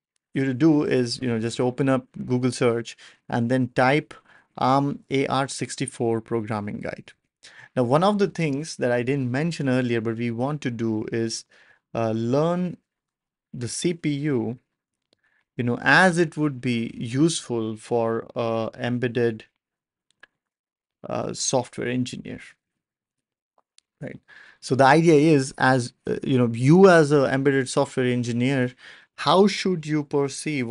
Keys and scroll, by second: 0.0 ctrl+alt+super+p.